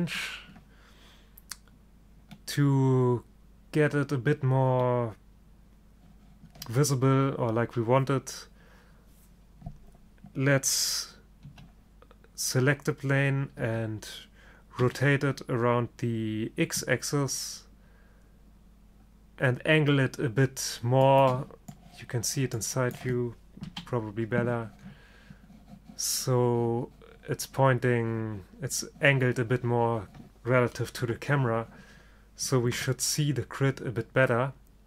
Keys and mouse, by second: 2.5-11.5 middle drag, 11.5 g, 14.9 r, 23.8 KP_3, 31.1 KP_0.